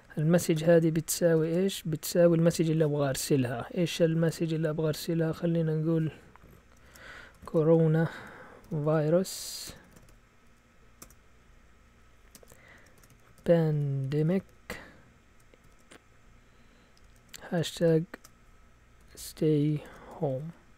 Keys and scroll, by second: 0.6-1.4 typing, 6.6-11.0 typing, 12.3-15.6 typing, 17.0-20.7 typing.